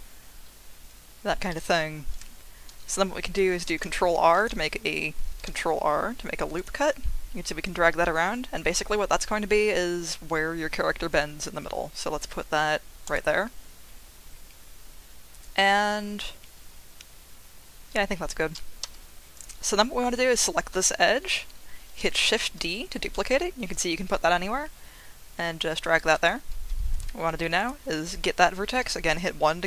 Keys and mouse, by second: 3.7 ctrl+r, 13.0 click, 18.8 2, 20.4 shift+middle click, 22.0 shift+d, 26.0 click, 26.9 1, 27.6-28.9 drag, 28.9 1.